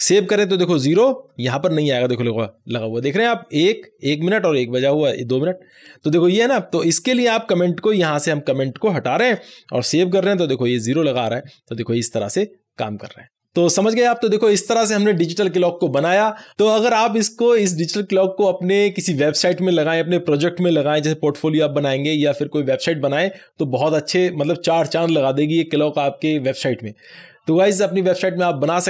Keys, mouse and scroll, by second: 0.0 ctrl+s, 7.2-9.1 drag, 9.1 alt+shift+a, 10.1 ctrl+s, 12.9 click.